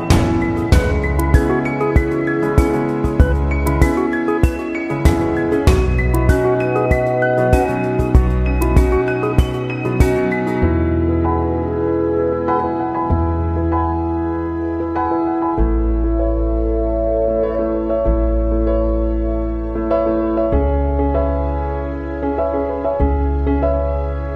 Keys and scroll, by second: 11.0 ctrl+=.